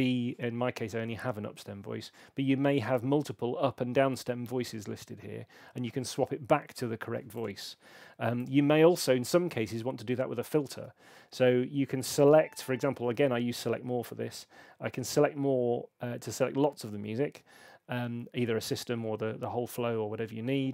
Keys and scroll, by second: 12.8 shift+super+a, 13.0 shift+super+a, 13.2 shift+super+a.